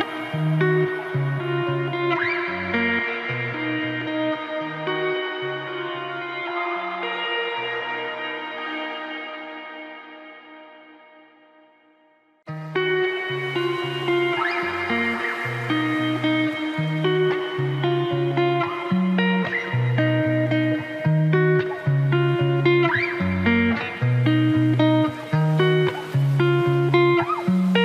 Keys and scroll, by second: 4.4 ctrl+t, 18.9 ctrl+t.